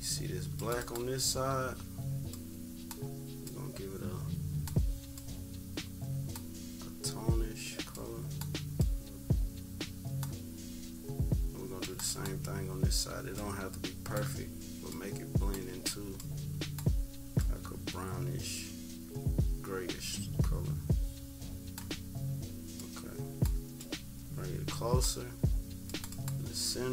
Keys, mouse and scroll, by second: 2.3 click, 3.4 click, 5.1 click, 7.9 click, 11.8 click, 13.4 click, 14.8-15.5 drag, 16.2 click, 17.4 click, 22.7 click, 26.0 click.